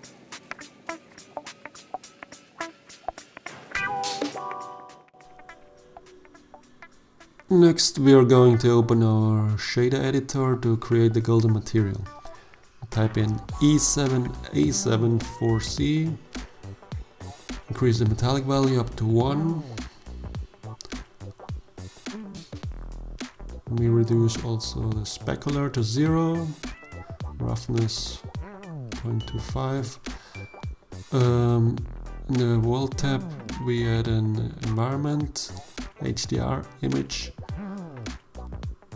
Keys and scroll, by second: 13.1-14.8 typing, 15.1 Return, 18.8 0, 26.3 ., 26.5 2, 27.0 Return.